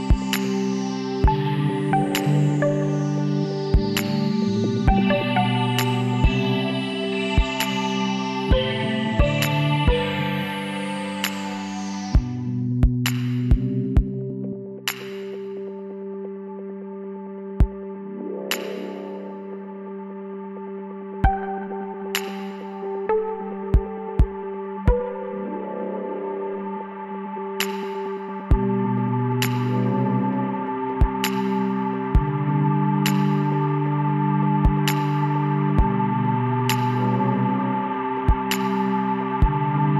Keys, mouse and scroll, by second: 3.6-5.7 middle drag, 4.5 w, 8.2 Tab, 8.5-9.6 middle drag, 12.3-19.6 middle drag, 18.4 Tab, 21.1 right click, 21.8-24.3 middle drag, 25.5-27.3 middle drag, 26.7 shift+s, 31.3-36.0 middle drag, 36.0 shift+a, 39.6-39.9 middle drag.